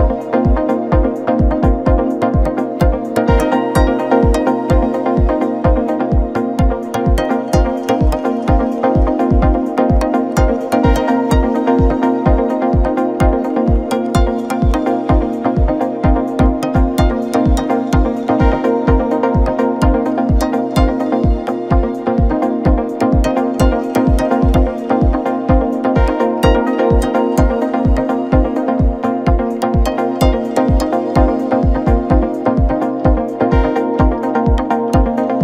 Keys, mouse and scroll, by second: 0.3 scroll down 1, 0.6-2.1 middle drag, 2.1-2.6 scroll up 2, 2.6-3.6 scroll down 3, 3.6 ctrl+KP_Add, 3.7 ctrl+KP_Add, 4.3 KP_1, 4.7-5.0 scroll up 1, 5.0 g, 7.0 ctrl+KP_Add, 7.6 g, 8.7 scroll down 2, 8.8 middle click, 9.6 Tab, 9.7 scroll down 1, 9.9-10.6 middle drag, 10.6 KP_7, 11.3-11.7 shift+middle drag, 11.7 scroll up 3, 11.9 scroll down 3, 12.1-13.4 middle drag, 13.4 KP_7, 13.6 Tab, 13.9-14.2 scroll up 2, 14.2 a, 14.5-14.9 scroll up 2, 14.9-16.0 scroll down 1, 16.0 click, 16.9 KP_7, 17.4 scroll up 1, 17.6-18.0 scroll down 2, 18.0 shift+middle click, 18.7-20.7 scroll up 1, 20.7 u, 21.2-22.8 scroll up 2, 22.8 a, 23.8-25.2 scroll down 10, 25.2 click, 25.6 scroll up 1, 25.8-26.2 scroll down 2, 26.2 KP_7, 28.7-33.5 drag, 34.9-35.4 drag.